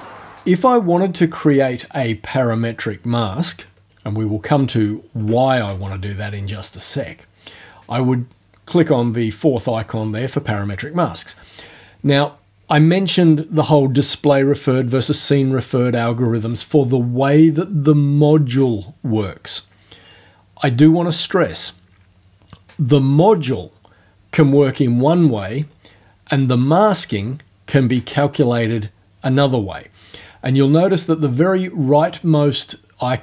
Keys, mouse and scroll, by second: 2.4 click, 4.3 ctrl+alt+scroll up 1.